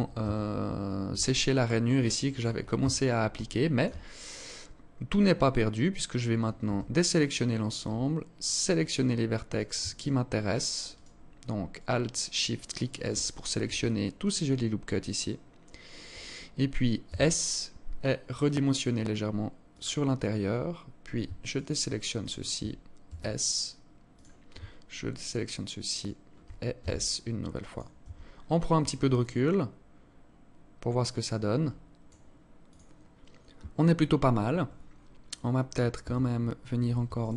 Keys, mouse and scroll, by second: 0.7 alt+click, 1.4 alt+click, 2.1 Tab, 2.7 alt+shift+click, 3.3-3.7 scroll up 5, 4.1 scroll up 2, 4.9 scroll down 2, 5.9 a, 8.9 alt+right click, 9.3 alt+shift+right click, 9.7 alt+shift+right click, 10.3 alt+shift+right click, 11.3 alt+shift+right click, 11.7 alt+shift+right click, 12.2 alt+shift+right click, 12.5-12.9 scroll down 6, 13.1 alt+click, 16.4 s, 19.3-20.3 scroll up 7, 20.8 alt+shift+right click, 21.6 alt+shift+right click, 22.4 s, 24.6 alt+shift+right click, 25.3 alt+shift+right click, 26.1 s, 27.3 Tab, 27.6-28.5 scroll down 10, 28.5 alt+click, 34.5-35.6 scroll up 10, 35.6 Tab, 36.8 alt+shift+right click.